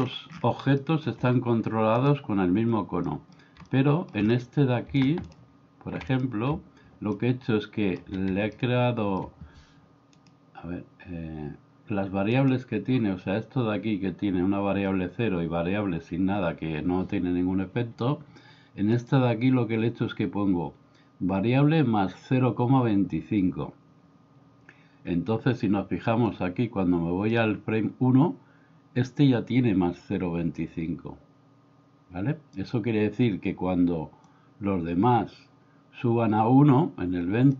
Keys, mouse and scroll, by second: 0.9 middle click, 3.1 middle click, 3.7-4.2 middle drag, 7.2-8.0 middle drag, 8.5-9.3 middle drag, 26.3 click, 34.3-37.5 drag.